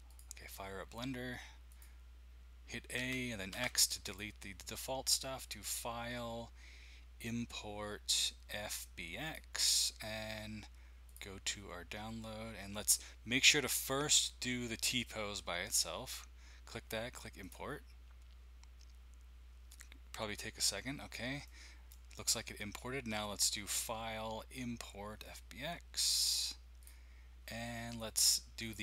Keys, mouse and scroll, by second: 0.2 click, 1.7 click, 3.0-3.5 typing, 4.0 click, 5.6-8.2 drag, 9.2 click, 11.0 click, 14.0 click, 17.4 click, 20.7-21.6 scroll up 1, 21.4 middle click, 23.6 click, 26.8 click, 27.2-28.5 drag, 28.6 click.